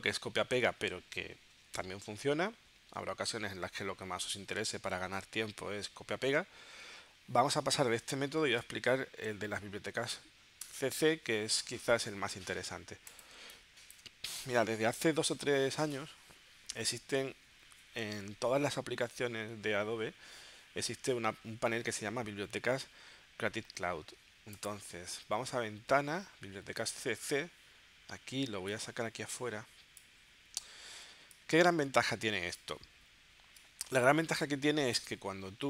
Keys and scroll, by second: 10.7 BackSpace, 13.4 space.